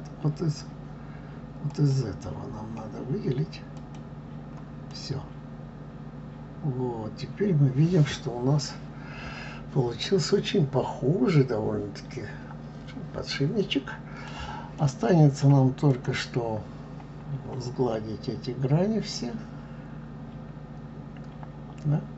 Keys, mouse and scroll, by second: 3.7 click, 4.9-7.9 middle drag, 14.7-15.9 middle drag, 15.9 click, 16.6-17.3 scroll up 1, 17.3 scroll up 1, 17.9 scroll up 1, 17.9-21.0 middle drag.